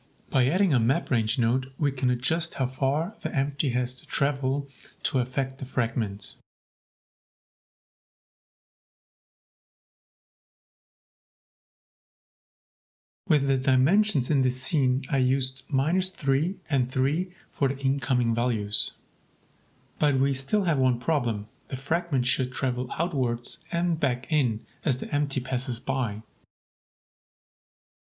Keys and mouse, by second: 4.7 click, 5.2 middle click, 7.6-8.1 middle drag, 9.3 shift+click, 9.8 g, 9.9 z, 12.0 click, 12.8-15.4 drag, 15.9-19.1 drag, 19.8-20.5 middle drag, 21.4 click, 22.7 g, 22.9 z, 25.8 middle click, 26.6 click, 26.9 shift+drag, 27.7 click, 27.9 click.